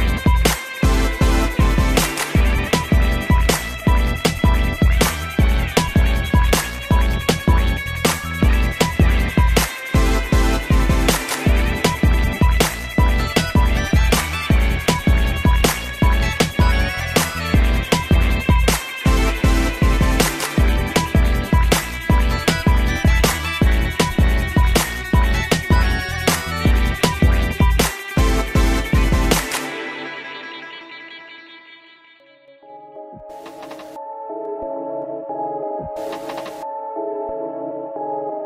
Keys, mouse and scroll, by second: 1.0 click, 1.2 click, 2.2 click, 7.6 middle click, 8.1 scroll down 2, 8.5 middle click, 9.5 click, 9.6 click, 13.7 7, 14.7 g, 15.7 click, 16.6 ctrl+c, 16.9 Up, 17.5 ctrl+v, 19.1 middle click, 21.5 click, 29.7 middle click, 31.5 click, 31.6 click, 31.9 middle click, 33.3 middle click, 34.6 click, 34.7 click, 35.4 7, 36.3 g, 37.5 click, 37.6 click, 38.0 middle click.